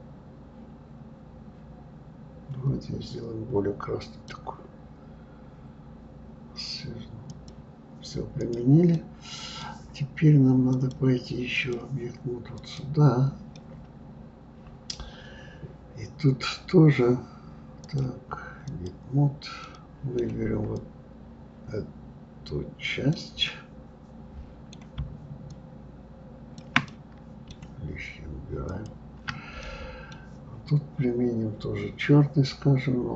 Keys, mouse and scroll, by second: 7.3 click, 8.4 click, 8.9-10.7 middle drag, 10.7-12.8 drag, 13.5-16.6 middle drag, 17.8-19.6 drag, 19.6-20.7 middle drag, 20.7-23.5 drag, 23.5-25.5 middle drag, 25.5-26.9 shift+drag, 26.9-28.7 middle drag, 28.7 ctrl+click, 29.6-32.6 middle drag.